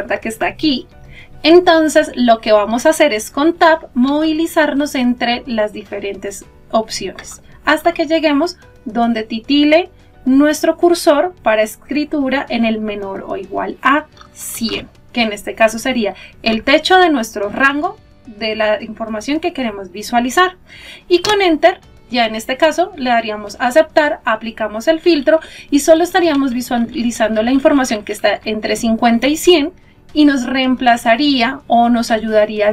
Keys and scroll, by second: 3.9 Tab, 22.1 Return.